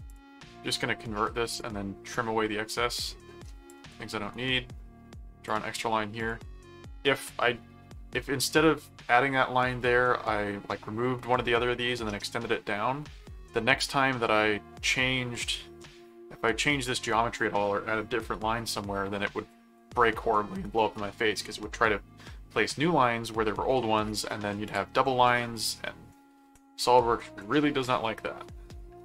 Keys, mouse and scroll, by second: 0.1 click, 1.5 click, 4.3 right click, 5.4 click, 6.2 click, 24.6 click, 27.9 middle click.